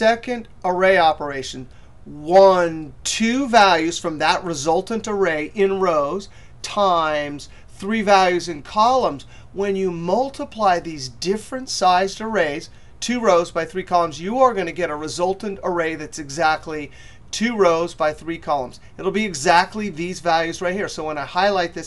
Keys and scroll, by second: 21.4 F9.